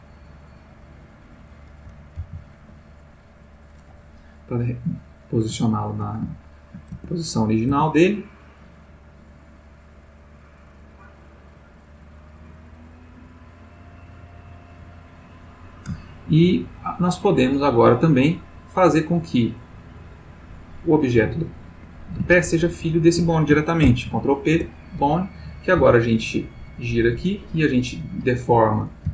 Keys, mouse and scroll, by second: 1.3 click, 2.2 alt+g, 4.7 click, 5.6 ctrl+middle click, 6.5-7.0 ctrl+shift+middle drag, 7.0 shift+Tab, 7.7 Tab, 13.3 click, 14.5 click, 16.0-16.7 ctrl+middle drag, 17.3 g, 19.4 click, 20.2 click, 21.2 g, 21.7 Escape, 22.4 shift+click, 23.8 ctrl+p, 24.6 Return, 25.8 r, 28.3 Escape, 29.0 g.